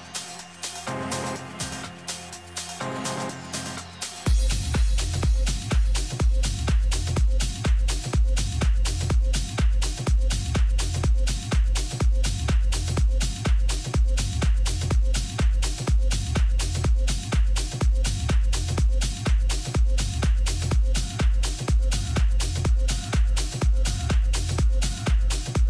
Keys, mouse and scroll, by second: 7.1 z, 8.1 z, 8.9 Tab, 9.5 a, 11.3-13.2 drag, 17.0 Tab, 17.4-19.3 middle drag, 22.7-24.6 drag, 24.4-25.6 middle drag.